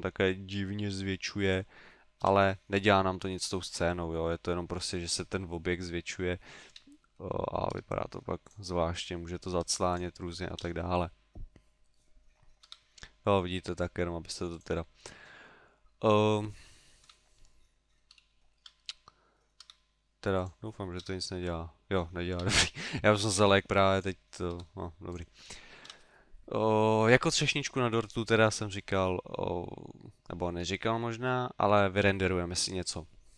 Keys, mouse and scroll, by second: 1.5 click, 2.2 KP_0, 6.7 KP_7, 7.8 s, 8.6 click, 8.9 middle click, 9.7 s, 10.0 click, 10.6 KP_0, 12.6 s, 14.6 click, 17.0 KP_7, 18.3 shift+middle click, 19.7 s, 20.4 click, 21.0 KP_0, 22.4 KP_7, 23.2 s, 24.1 click, 24.6 s, 25.2 click, 25.9 KP_0.